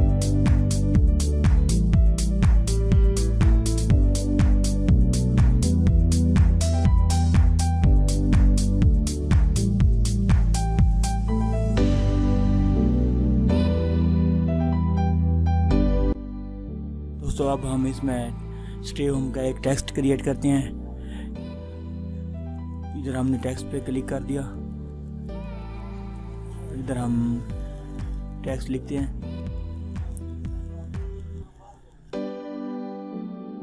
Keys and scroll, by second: 10.2 ctrl+alt+z, 12.7 ctrl+-.